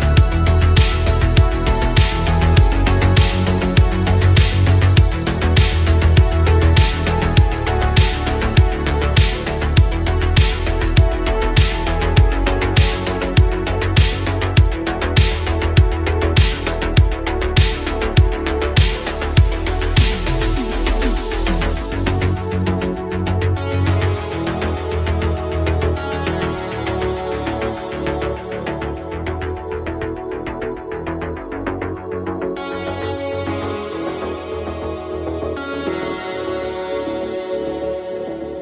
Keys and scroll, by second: 0.0 ctrl+z, 0.3 ctrl+z, 0.8 ctrl+z, 4.1 ctrl+z, 5.0 ctrl+z, 7.6 ctrl+z, 7.8 ctrl+z, 8.9 ctrl+z, 9.1 ctrl+z, 9.3 ctrl+z, 9.9 ctrl+z, 10.2 ctrl+z, 10.5 ctrl+z, 10.9 ctrl+z, 14.6 space, 19.8 space, 23.0 ctrl+z, 28.1 ctrl+z, 29.9 ctrl+z, 30.3 ctrl+z, 30.8 ctrl+z, 38.2 ctrl+z, 38.4 ctrl+z.